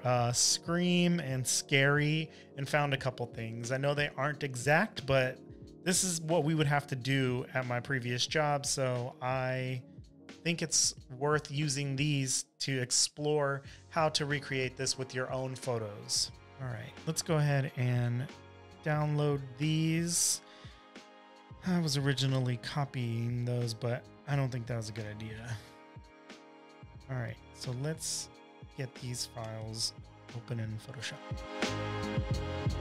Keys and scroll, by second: 2.9 super+Tab, 4.9 super+v, 5.4 space, 5.9 space, 6.0 space, 6.1 v, 7.6 super+-, 9.2 space, 9.7 space, 9.8 space, 10.2 v, 11.5 space, 11.9 super+-, 12.4 space, 12.9 space, 13.0 space, 16.4 super+Tab, 31.8 super+Down, 32.7 m.